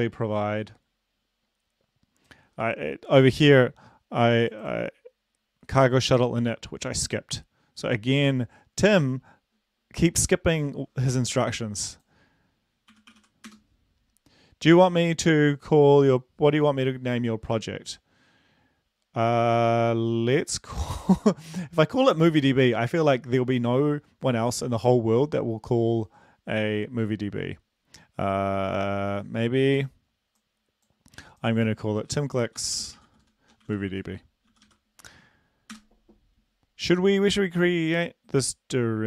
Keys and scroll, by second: 12.9-13.5 typing, 32.0-34.6 typing, 35.7 Return.